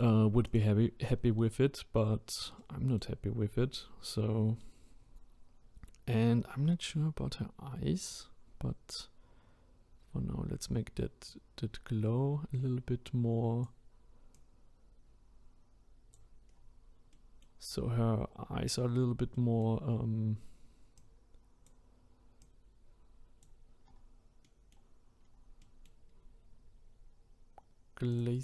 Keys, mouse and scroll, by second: 0.4 click, 1.2-2.0 scroll up 4, 2.0-2.6 scroll down 2, 2.6-3.2 middle drag, 3.2-3.7 scroll down 1, 3.7-6.7 scroll up 1, 9.0-10.2 scroll up 1, 10.2-11.3 scroll up 1, 11.3-16.5 drag, 16.5-17.1 scroll down 2, 17.1-17.7 middle drag, 17.7 scroll up 2, 18.3-18.7 scroll down 2, 18.9-19.3 scroll up 2, 19.3 middle click, 19.8-20.9 scroll up 2, 20.9-23.8 drag, 23.8-24.4 scroll down 2, 24.4-25.1 middle drag, 25.1-25.6 scroll down 3, 25.6-26.1 middle drag, 26.1-28.1 scroll up 5, 28.1-28.4 drag.